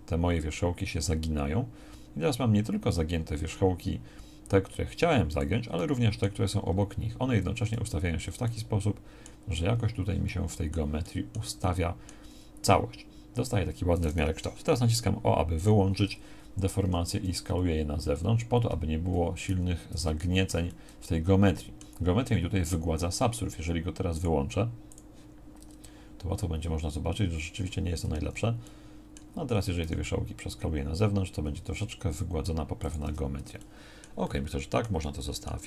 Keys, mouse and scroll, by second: 7.8 z, 15.6 o, 16.9 s, 19.5 z, 25.6 Tab, 28.0 Tab, 29.8 s, 33.0 Tab.